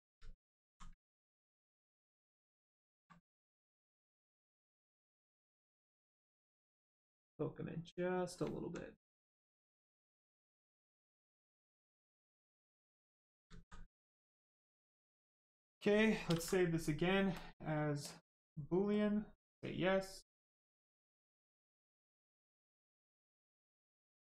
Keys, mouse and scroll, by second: 0.2 alt+right click, 0.8 ctrl+right click, 1.4 ctrl+click, 3.1 click, 3.2 right click, 4.8 click, 8.6 alt+right click, 9.2 right click, 9.2 right click, 11.0 alt+right click, 11.8 right click, 11.8 right click, 12.6 ctrl+click, 13.5 alt+right click, 14.0 right click, 14.1 right click, 17.3 click.